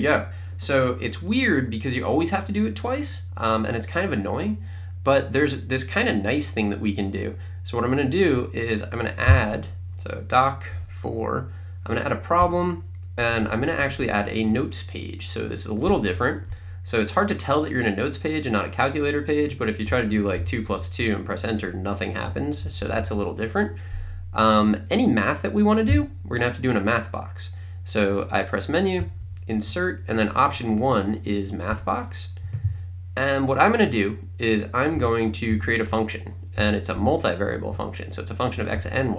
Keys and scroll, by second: 10.8 4, 12.4 Return, 13.2 Down, 15.9 Return, 19.9 2, 20.7 2, 21.0 Return, 22.3 BackSpace, 26.0 Menu, 29.1 Down, 29.6 Right, 31.7 Return, 34.8-36.9 typing, 37.7 Right.